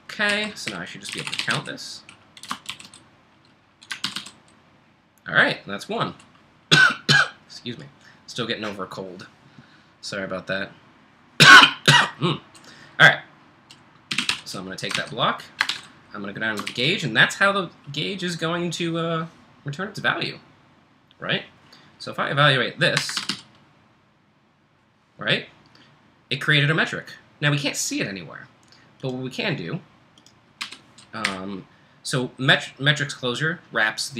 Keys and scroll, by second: 0.0-2.7 typing, 3.8-4.5 typing, 13.9-16.7 typing, 14.9 ctrl+j, 22.7-24.8 typing, 30.6-31.2 typing.